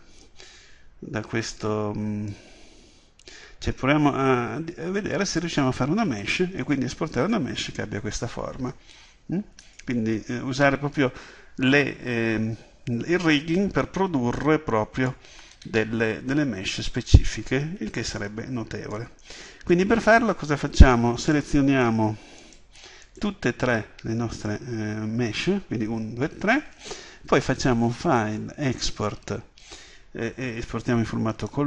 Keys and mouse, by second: 0.0 Escape, 21.3-24.9 right drag, 24.8-29.8 drag.